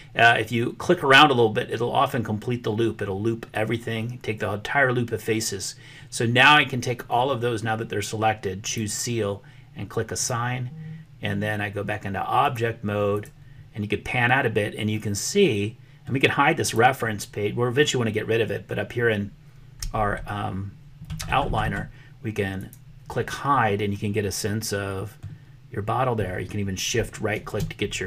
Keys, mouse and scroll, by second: 8.6 click, 10.2 click, 12.5 click, 15.0-16.1 middle drag, 16.6 click, 22.6 click, 24.5 middle click, 27.3 shift+click.